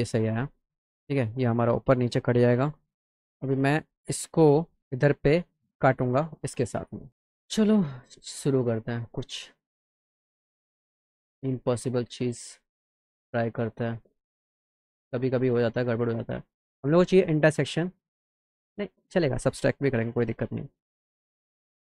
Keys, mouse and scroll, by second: 4.8-5.8 drag, 6.0 alt+middle click, 7.5 click, 8.7 click, 9.2 click, 9.5-9.8 scroll down 1, 10.1-10.5 scroll down 1, 10.9 click, 12.3 click, 14.2 click, 14.7 click, 20.4 click.